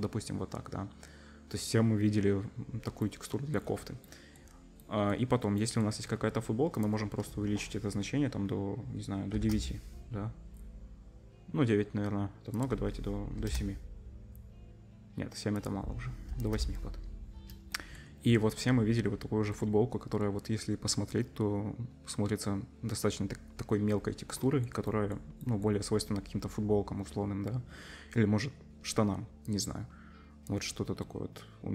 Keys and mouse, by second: 19.4-31.7 middle drag.